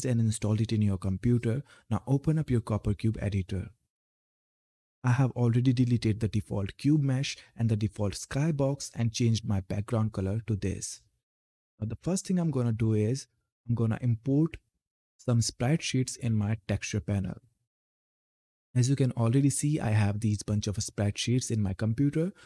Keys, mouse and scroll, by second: 2.8 click, 12.5 click, 18.3 scroll down 1, 20.2 click.